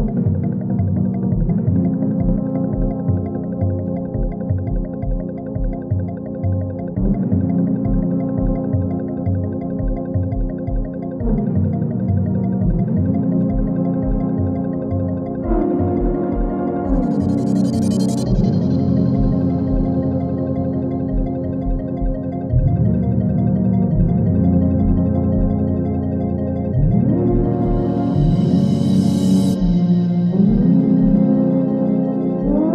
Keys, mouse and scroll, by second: 1.0-1.9 drag, 3.3 space, 5.4-6.3 alt+drag, 7.1 space, 9.5 click, 12.1 u, 12.6 space, 14.5 click, 18.7-19.8 typing, 20.0 Down, 20.4 Return, 20.7 ctrl+a, 21.1 ctrl+c, 21.7 alt+click, 22.2 ctrl+v, 22.5 click, 22.8 space, 25.6 space, 26.5-28.4 drag.